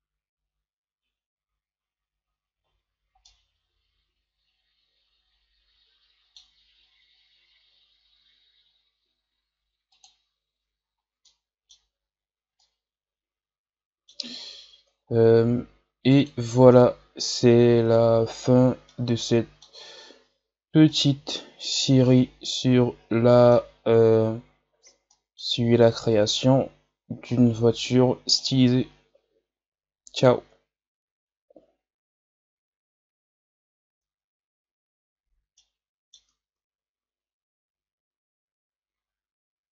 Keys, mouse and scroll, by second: 2.5 scroll down 4, 3.2-6.2 middle drag, 10.0 click, 10.7 scroll down 1, 11.2-11.8 middle drag, 11.8-12.5 scroll up 5, 12.5-14.3 middle drag, 14.3-14.9 scroll down 3, 14.9-16.3 scroll up 5, 16.3-18.8 drag, 18.8-20.3 middle drag, 20.3 scroll down 2, 20.8-26.4 middle drag, 26.4-27.2 scroll up 1, 27.2-29.8 middle drag, 29.8-31.1 scroll up 3, 31.1-31.6 scroll up 1, 35.0 ctrl+s, 35.5-36.5 middle drag, 36.5 ctrl+s.